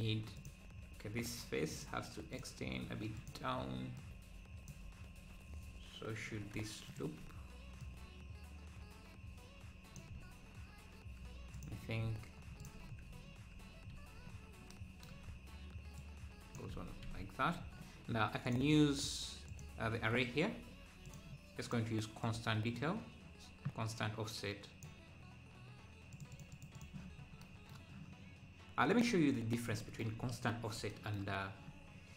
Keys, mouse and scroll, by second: 0.4-10.2 drag, 10.2 `, 10.6 `, 11.6-12.9 drag, 12.9 scroll down 1, 13.1 `, 13.9 `, 14.3-14.7 scroll up 1, 16.0 click, 16.0-16.5 scroll down 3, 16.8 Tab, 17.1 `, 17.6-18.5 scroll down 1, 18.5-25.2 drag, 26.1-27.2 drag, 27.2 scroll down 1, 28.9 click, 30.1 scroll up 1, 30.5 click.